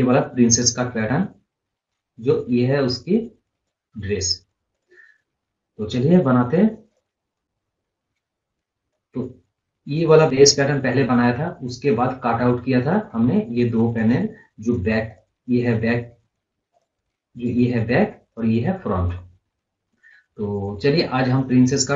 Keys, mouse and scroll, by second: 6.8 click, 7.4-8.0 scroll up 1, 8.8-11.8 drag, 11.8 scroll up 1, 12.8-15.0 drag, 18.9 scroll up 2, 19.1 scroll down 1, 20.0 scroll down 1, 20.6-21.3 scroll up 1, 21.3 scroll down 1.